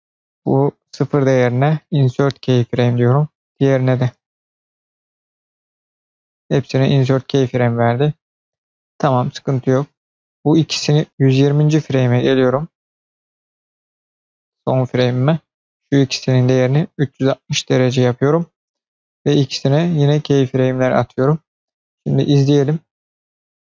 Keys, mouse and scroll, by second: 0.1-1.5 drag, 1.9 click, 1.9 right click, 3.0-5.0 drag, 3.0 right click, 10.2-14.1 drag, 15.3-17.5 drag, 19.2 click, 19.8 click, 21.9 click, 23.3 space.